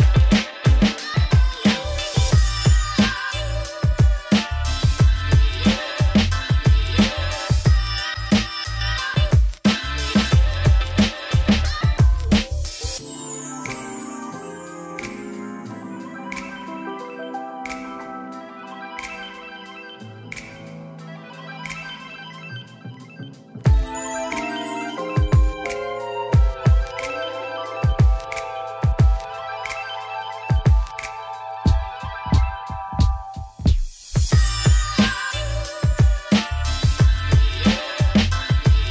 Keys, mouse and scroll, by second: 0.1-1.4 middle drag, 5.8 Tab, 6.1 ctrl+2, 6.4 right click, 6.8 Tab, 7.0 ctrl+r, 8.0 Tab, 8.5 Tab, 8.9 3, 9.0 click, 9.4 z, 10.6 Tab, 10.8 z, 11.1 middle click, 11.4 scroll down 4, 11.7-12.3 scroll up 7, 12.3 click, 12.9-13.7 scroll down 1, 13.7 scroll down 1, 13.8 x, 15.0-16.1 right drag, 16.9 click, 17.2 Tab, 18.0 Tab, 19.0 shift+d, 19.5 Tab, 20.1 ctrl+r, 20.9 3, 21.1 alt+click, 21.4 x, 22.6 click, 22.7 x, 23.8 alt+click, 24.4 click, 24.6 x, 25.2 alt+click, 25.9 alt+e, 27.9 click, 28.2 click, 28.8 middle click, 29.3 alt+e, 31.1 click, 31.6 ctrl+click, 32.0 KP_1, 32.4 scroll up 4, 32.8 e, 34.7 middle click, 34.9 scroll down 3, 35.0 z, 35.3 Tab, 35.8 middle click, 36.3 scroll up 2, 36.5 shift+middle click, 36.9-38.9 drag.